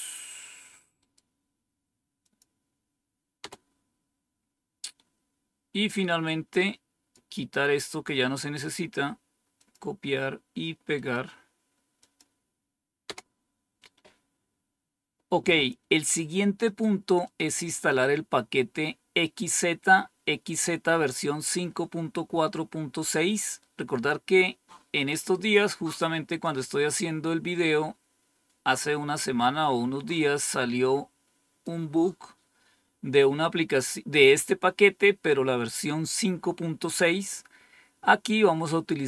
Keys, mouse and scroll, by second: 2.1 click, 3.3 Return, 5.8-7.1 drag, 9.5 click, 11.9 click, 13.0 Return, 16.6 click, 17.2 click, 23.0-25.6 drag, 26.3 click, 30.1-31.6 drag.